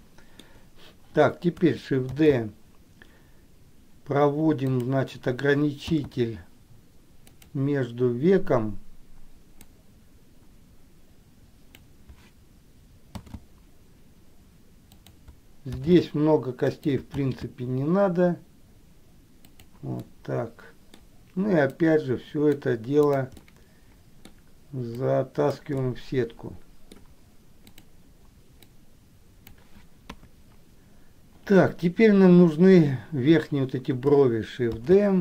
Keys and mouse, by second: 0.1 shift+middle click, 2.5 shift+d, 6.2 shift+d, 9.8-12.1 drag, 13.5 shift+d, 17.6 shift+d, 20.3 middle click, 22.0 click, 23.7 middle click, 25.1 click, 26.0-27.1 middle drag, 29.0 click, 30.2 KP_1, 35.0 shift+d.